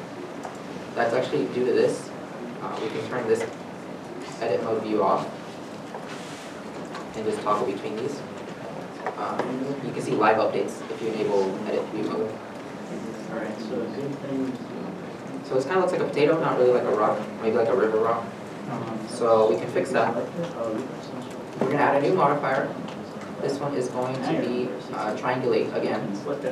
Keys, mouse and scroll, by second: 5.1 middle click, 6.0 Tab, 6.5 Tab, 7.9 Tab, 8.1 Tab, 14.6 Tab, 15.2 middle click.